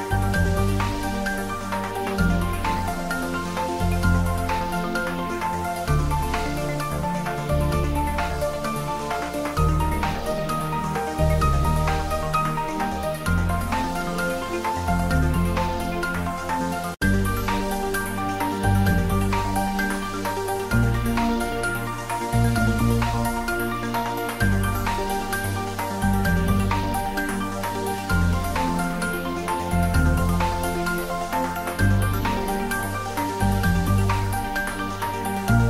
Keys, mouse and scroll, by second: 0.3-0.6 middle click, 1.0 click, 1.3-1.9 shift+middle click, 2.3 r, 2.6 Up, 3.7 Return, 4.7 ctrl+s, 5.2-6.1 typing, 6.2 click, 7.2 ctrl+s, 10.9 click, 13.3 click, 14.9-15.8 scroll down 1, 17.8-19.1 scroll down 1, 19.3 click, 21.1 click, 22.2-22.5 middle click, 22.7 click, 24.7 click, 25.0 ctrl+s, 26.1 s, 27.1 ctrl+s, 27.8 click, 34.6 ctrl+s.